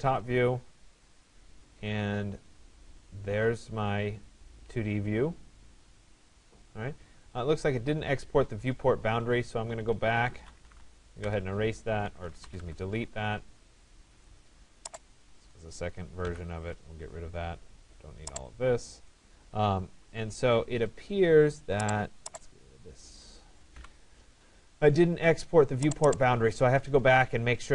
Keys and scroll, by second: 10.9 Return, 16.3 Delete, 23.4 Delete.